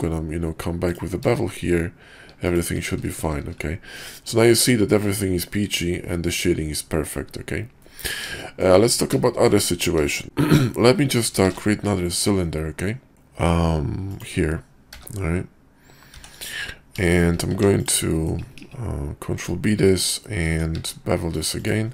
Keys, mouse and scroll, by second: 3.1 shift+2, 3.9-7.1 middle drag, 7.7-8.1 middle drag, 8.4 shift+middle click, 9.2 shift+middle click, 11.4 shift+a, 14.8 g, 17.1 shift+middle click, 17.5 Tab, 17.8 click, 18.1 middle click, 18.5 ctrl+b, 20.4 Tab, 20.8 q.